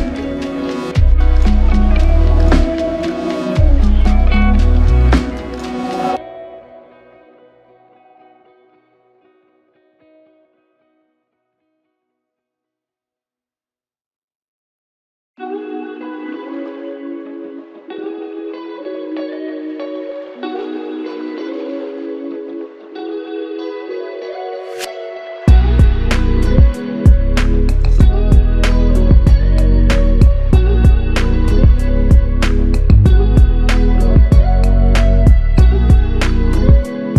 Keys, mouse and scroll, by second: 2.6 typing, 5.3 alt+click, 18.1 typing, 20.1 alt+click, 24.7 double click, 27.7 double click, 29.7 alt+click, 34.1 alt+click, 35.1 f, 36.0 double click.